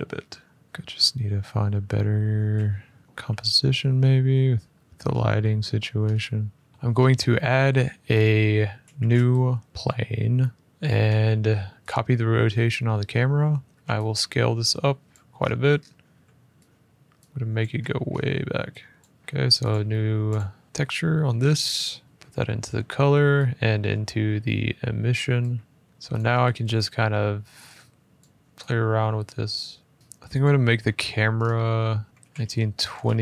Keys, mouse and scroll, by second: 0.6 scroll, 1.7-2.4 scroll, 2.9 middle click, 3.0 F11, 4.6 middle click, 4.8 middle click, 4.9 middle click, 5.5 middle click, 5.6 middle click, 5.7-6.1 scroll, 6.3 F11, 6.7-7.1 scroll, 6.7 a, 7.9-8.8 scroll, 8.8 a, 9.7 click, 10.6-11.6 scroll, 10.6 r, 11.6 click, 13.1 middle click, 13.7 middle click, 13.7 s, 14.8 click, 15.1 middle click, 15.1 middle click, 15.2 middle click, 15.5 middle click, 15.6 middle click, 15.9 g, 16.9 middle click, 17.3 click, 17.5 middle click, 17.8 middle click, 17.9 middle click, 18.7 click, 19.1 middle click, 19.4 click, 20.3 click, 20.6 middle click, 20.6-22.0 scroll, 22.0 click, 25.1 click, 25.8 middle click, 25.8 g, 25.9 click, 27.9 click, 30.0 shift+middle click, 30.2 click, 30.5 shift+scroll, 31.1-31.8 scroll, 31.9 click, 32.1 click, 32.1-33.2 typing.